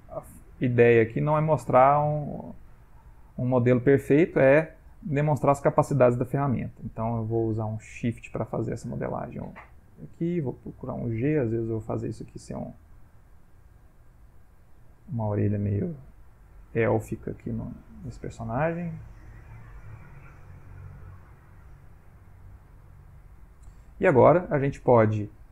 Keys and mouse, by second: 0.9 click, 1.4 click, 1.9 click, 2.5 click, 2.7 click, 3.2 middle click, 3.8 ctrl+middle click, 4.1 ctrl+middle click, 4.5 middle click, 5.2 middle click, 7.0 shift+click, 7.4 shift+click, 7.9 shift+click, 8.4 shift+click, 9.7 middle click, 10.3 g, 10.6 click, 12.6 click, 13.4 click, 14.0 click, 14.9 click, 16.2 click, 16.8 click, 17.3 click, 17.9 click, 18.4 click, 19.3 middle click, 20.2 click, 20.9 click, 21.4 click, 21.9 click, 22.5 middle click, 23.5 middle click.